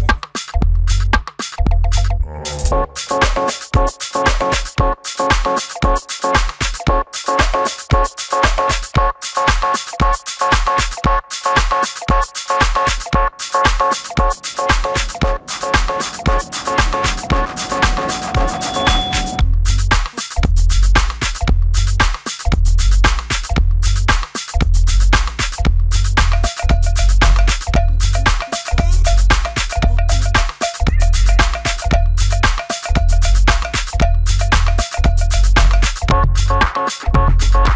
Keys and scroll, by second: 7.0 shift+space, 7.1 Escape, 30.0 space, 30.1 Escape, 37.1 shift+s.